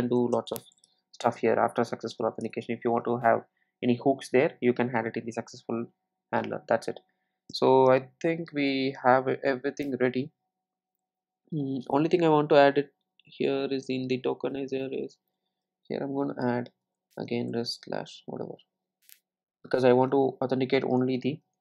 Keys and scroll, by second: 1.6 super+s.